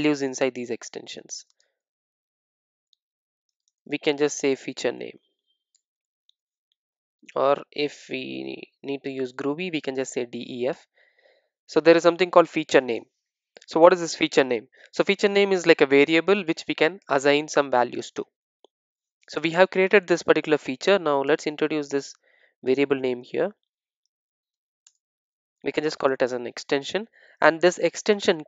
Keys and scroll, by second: 19.4 alt+Return, 25.3 Return.